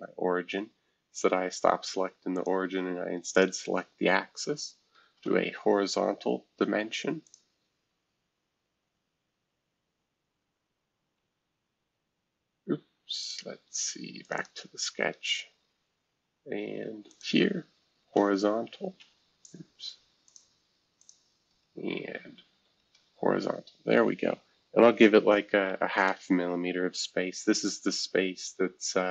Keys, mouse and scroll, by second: 0.5 scroll up 3, 2.3 click, 3.3 shift+click, 5.1 shift+h, 7.2 click, 11.2 Escape, 11.3 Escape, 13.2-15.6 drag, 15.6-16.2 scroll up 2, 17.0 click, 18.0 shift+h, 18.9 Escape, 20.2 shift+click, 21.1-22.5 shift+drag, 22.5 h, 25.6-26.1 typing, 26.1 Return, 27.5-28.3 scroll down 1, 28.3-29.1 scroll down 1.